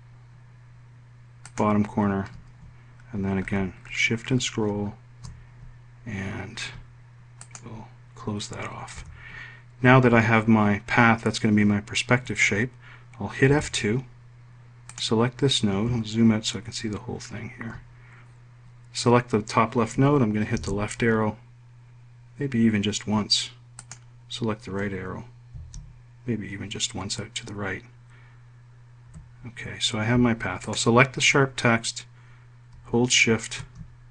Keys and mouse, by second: 8.0 click, 9.6 F1, 14.1 F2, 15.5 click, 21.1 Left, 24.3 click, 26.1 Right, 29.6 F1, 31.2 click.